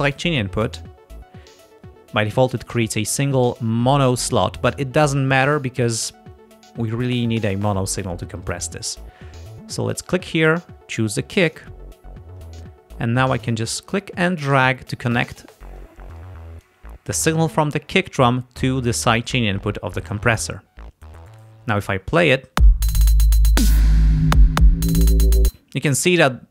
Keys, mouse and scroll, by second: 0.0 click, 10.0 click, 11.6 click, 13.4-15.2 drag, 15.9-16.9 drag, 22.7 space, 25.5 space.